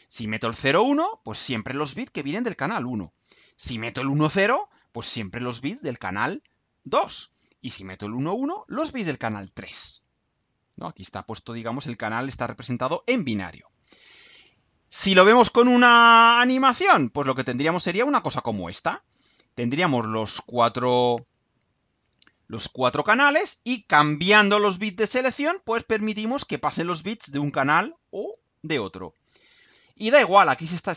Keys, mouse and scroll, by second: 13.5-14.6 scroll down 6, 16.5 ctrl+scroll up 2, 17.4-17.7 ctrl+scroll down 3.